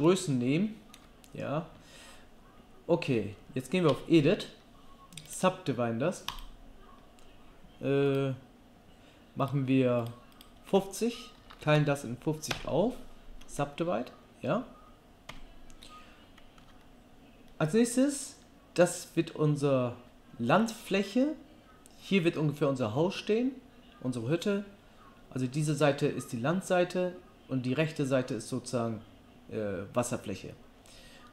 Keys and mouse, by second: 3.9 Tab, 10.1 click, 15.3 Tab, 16.6 Tab.